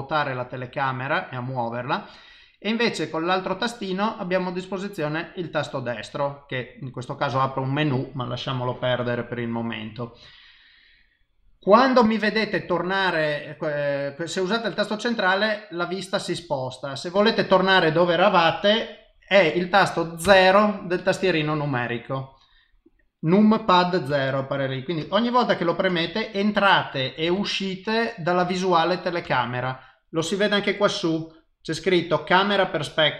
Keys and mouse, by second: 3.1 right click, 4.3 right click, 14.3 middle click, 20.2 KP_0, 24.1 KP_0, 25.0 KP_0, 25.9 KP_0, 27.3 KP_0, 28.4 KP_0, 29.2 KP_0, 31.2 click.